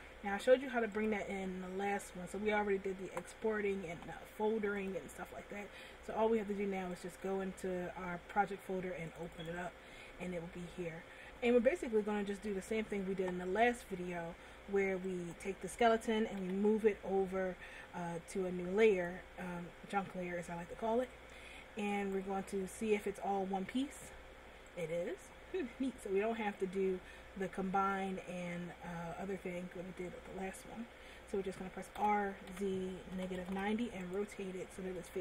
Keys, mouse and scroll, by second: 1.1 click, 10.0 click, 10.1 click, 10.9 scroll down 2, 11.8 middle click, 15.4 right click, 16.6 m, 22.2 right click, 24.3 g, 26.5 middle click, 32.2 r, 34.4 click.